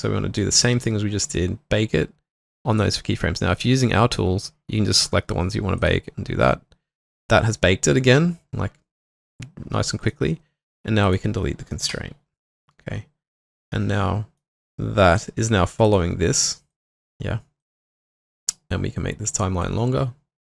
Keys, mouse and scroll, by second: 0.4 double click, 11.9 Delete.